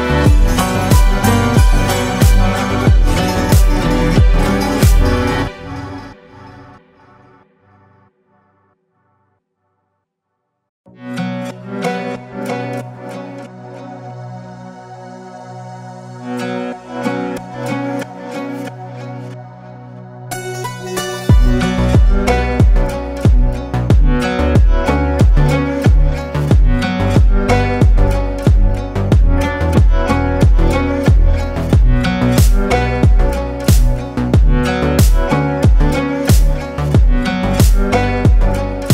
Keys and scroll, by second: 0.8 ctrl+shift+space, 10.2 ctrl+space, 11.0 typing, 19.9 ctrl+space, 20.5 ctrl+space, 25.2 ctrl+space, 26.9 ctrl+space, 27.6 ctrl+space, 29.1 ctrl+space, 31.9 ctrl+shift+space, 33.5 ctrl+shift+space, 34.7 ctrl+shift+space, 35.7 ctrl+shift+space, 37.0 ctrl+shift+space.